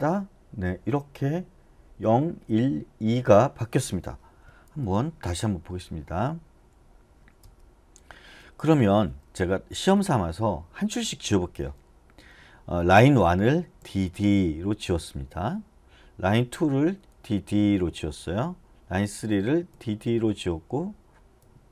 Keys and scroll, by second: 9.2 j, 10.0 j, 13.8 d, 14.1 d, 17.1 d, 17.5 d, 19.7 d, 20.0 d, 21.4 d.